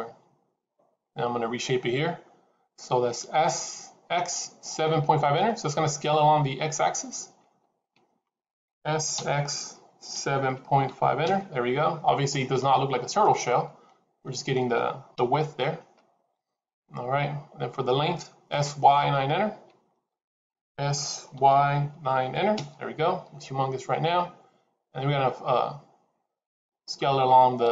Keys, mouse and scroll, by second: 8.6 s, 13.1 middle click, 15.0 KP_7, 20.6 s.